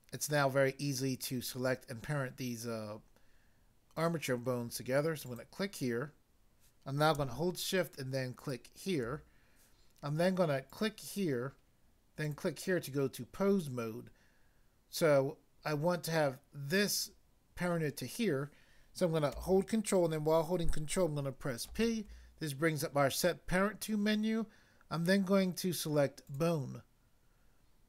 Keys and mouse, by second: 5.3 click, 8.3 shift+click, 10.7 click, 12.2 click, 21.7 ctrl+p, 26.3 click.